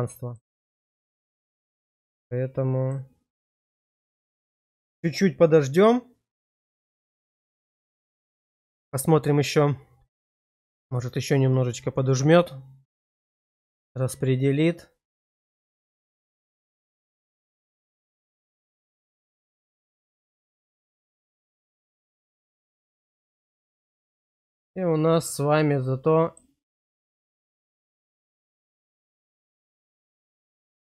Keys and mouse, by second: 1.1-2.8 middle drag, 20.1-21.9 middle drag, 22.4 middle click, 23.8 shift+middle click, 24.5-26.4 drag, 28.0 click, 29.0 shift+middle click, 29.7 middle click.